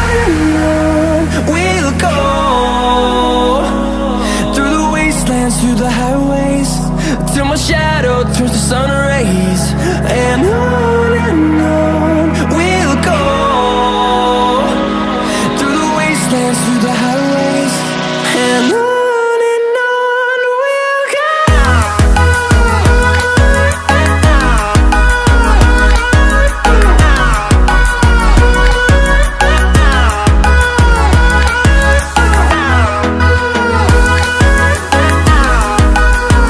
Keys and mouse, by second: 0.1 click, 1.0 click, 2.8-3.2 drag, 4.1 click, 11.0 click, 14.1 click, 15.1 click, 19.5 ctrl+z, 20.2 click, 20.6 ctrl+z, 21.2 ctrl+z, 21.4 ctrl+z, 22.3 ctrl+shift+z, 23.7 click, 24.4-25.1 drag, 30.2-31.7 drag, 32.6 click, 34.5-35.3 drag.